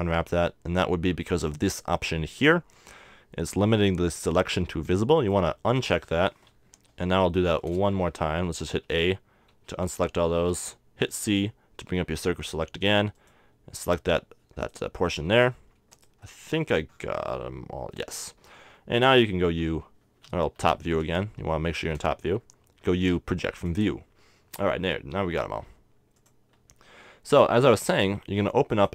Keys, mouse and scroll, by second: 5.5 click, 7.0 KP_7, 8.0 z, 9.0 z, 9.7 a, 10.6 c, 16.1-18.0 right drag, 16.3-18.0 drag, 18.0 middle click, 19.5 u, 20.4 Escape, 21.3 KP_7, 23.2 u, 25.8 g, 26.5 click.